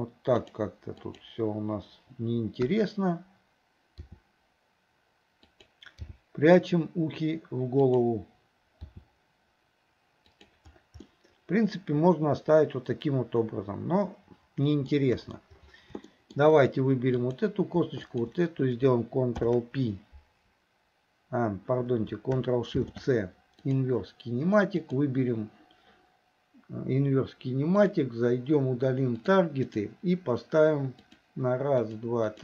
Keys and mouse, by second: 0.5 click, 1.2 click, 2.7 KP_1, 4.1 r, 6.1 g, 8.9 r, 11.1-14.9 middle drag, 15.2 KP_1, 16.1 shift+middle drag, 17.2 click, 18.1 shift+click, 19.4 ctrl+p, 22.4 shift+c, 24.9 click, 27.8 click, 29.7 click, 31.0 click, 31.9 click, 32.3 click.